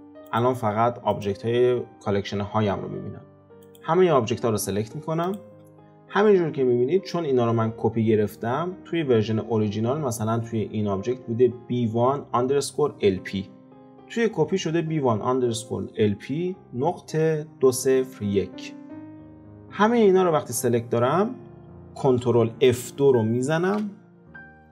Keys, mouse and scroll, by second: 0.4 click, 1.2 click, 3.7 click, 5.3 shift+click, 23.7 ctrl+F2.